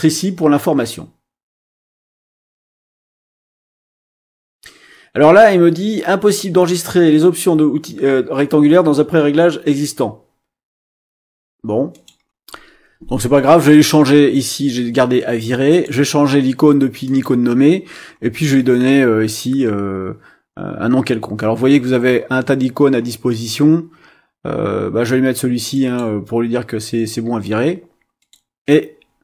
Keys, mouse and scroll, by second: 11.9 click, 15.7 click, 17.0 click, 19.4 scroll down 1, 19.9-20.3 scroll down 1, 21.4-21.9 scroll down 1, 22.1-22.4 scroll down 1, 22.7-23.1 scroll down 2, 23.4 scroll down 2, 24.0 scroll down 2, 25.7 click, 28.2 click.